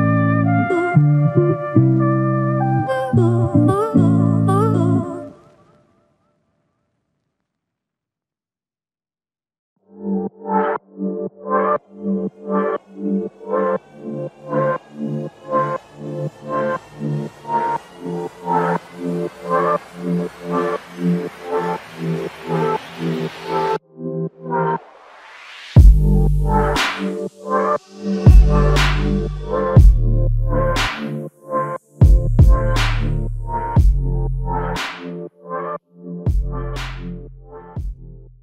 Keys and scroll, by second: 0.0 ctrl+scroll up 1, 10.9 scroll down 2.